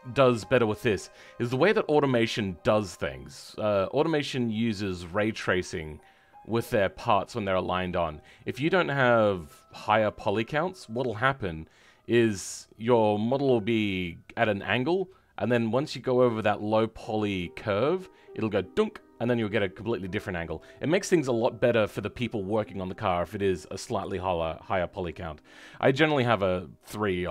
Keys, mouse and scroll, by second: 8.8-27.3 middle drag.